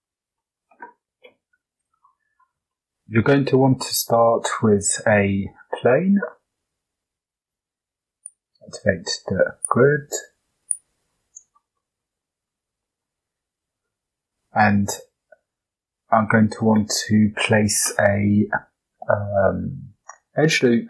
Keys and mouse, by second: 0.4 click, 1.2 KP_7, 2.7-3.1 shift+middle drag, 3.5 shift+a, 5.7 g, 8.1 click, 10.6 click, 11.2 Tab, 11.7 shift+click, 12.7 shift+click, 13.7 ctrl+r.